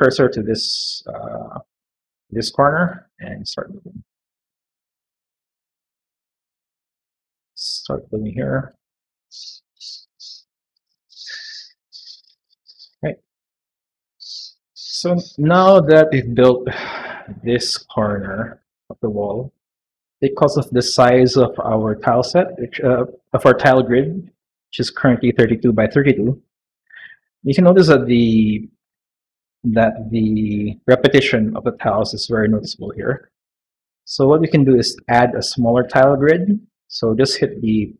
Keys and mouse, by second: 1.3 middle click, 1.5 middle click, 2.6 click, 3.0 click, 3.4 click, 5.2 click, 5.5 click, 6.2 click, 6.7 middle click, 7.2 shift+middle click, 8.1 click, 8.5 click, 8.8 click, 9.0 middle click, 9.9 middle click, 10.3 middle click, 11.3 click, 12.1-13.1 middle drag, 14.0 shift+middle click, 14.4 middle click, 14.9 middle click, 15.8 middle click, 16.6 click, 17.8 middle click, 18.3 shift+click, 27.4 middle click, 35.5 click, 36.4 click.